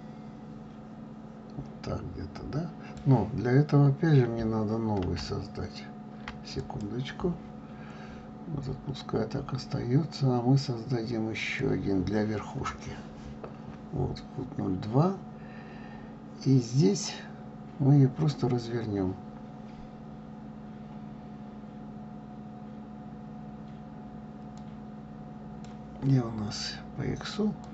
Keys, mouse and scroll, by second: 5.0 ctrl+z, 11.4-17.3 drag, 17.3 scroll up 1, 17.7-18.3 scroll down 2.